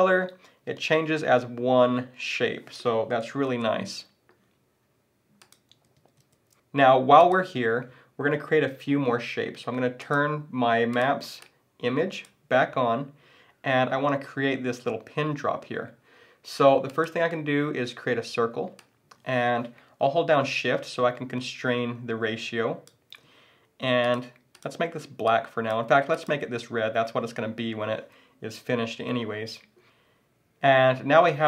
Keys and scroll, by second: 3.5 super+z, 6.0 super+z.